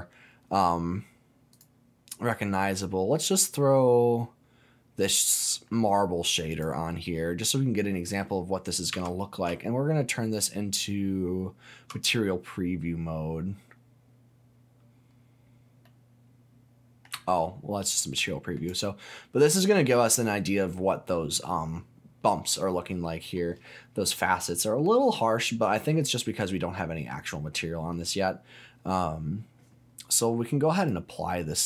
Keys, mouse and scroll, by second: 7.4 middle click, 8.9 z, 9.4 z, 15.8-17.0 middle drag, 17.1 z, 18.1 middle click, 18.7 click, 19.0-23.4 middle drag, 24.6 middle click, 25.5-26.0 scroll up 2, 26.0-27.9 middle drag, 28.4 scroll down 1, 30.7-31.6 drag.